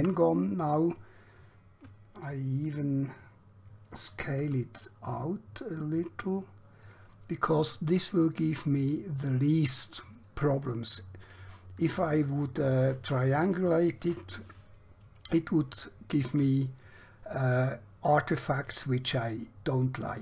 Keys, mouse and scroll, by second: 0.0 f, 4.5 s, 7.1 click, 16.5 middle click, 19.7 scroll down 1.